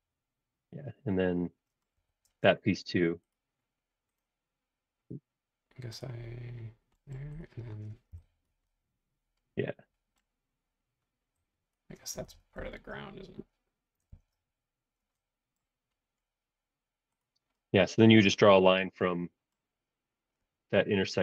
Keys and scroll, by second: 1.9 Escape, 2.2 space, 8.1 e, 12.2 super+z, 12.6 super+z, 14.1 shift+super+z, 15.0 space.